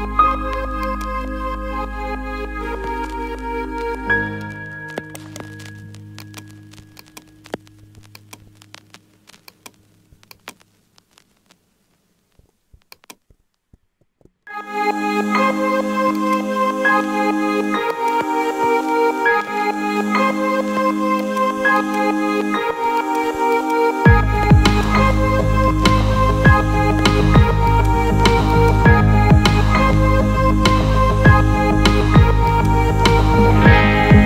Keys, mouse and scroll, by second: 1.0 alt+middle click, 3.7 click, 5.1-6.5 right drag, 7.0-8.0 alt+middle drag, 8.2 ctrl+alt+middle click, 9.4 click, 10.2-12.4 middle drag, 13.0-13.5 alt+middle drag, 14.1 shift+a, 17.9 drag, 18.6 s, 21.2 click, 21.8-22.8 ctrl+alt+middle drag, 23.0 middle click, 23.5-24.4 ctrl+alt+middle drag, 24.7-25.5 alt+middle drag, 25.9 s, 27.1 click, 27.8-28.3 alt+middle drag, 28.6-29.2 ctrl+alt+middle drag, 32.4 click.